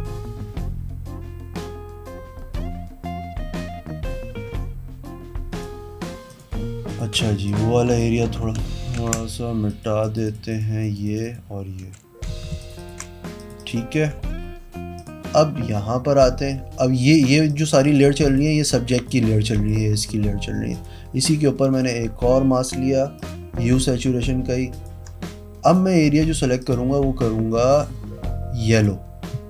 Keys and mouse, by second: 6.2 click, 6.8 click, 7.1 e, 7.4 click, 7.9 click, 8.5 ctrl+z, 9.0 ctrl+z, 9.6 click, 10.0 click, 10.2 click, 10.5 click, 10.7 click, 11.0 click, 11.2 click, 11.8 v, 12.2 z, 14.1 v, 14.9 click, 17.0 click, 17.4 click, 17.8 click, 18.2 click, 18.9 click, 19.5 click, 20.7 click, 21.7 click, 23.1 click, 24.7 alt+click, 25.6 click, 26.6 click, 28.7 click.